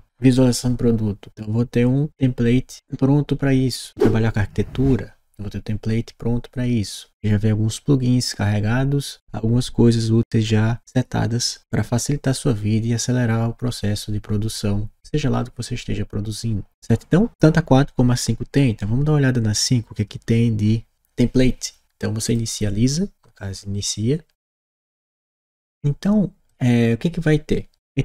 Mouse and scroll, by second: 22.1 click.